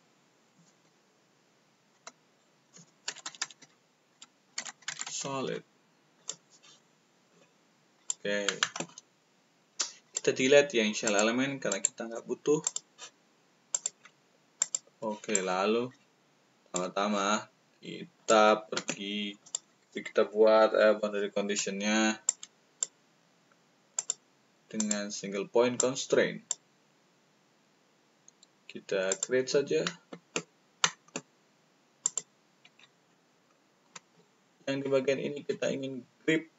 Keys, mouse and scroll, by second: 1.9 Caps_Lock, 4.4 s, 5.0 d, 6.1 click, 7.9 click, 10.0 click, 11.0 click, 11.6 right click, 12.6 click, 13.6 click, 14.5 click, 15.3-16.7 shift+drag, 18.1 click, 19.3 click, 22.2-22.7 drag, 23.9 click, 26.3 click.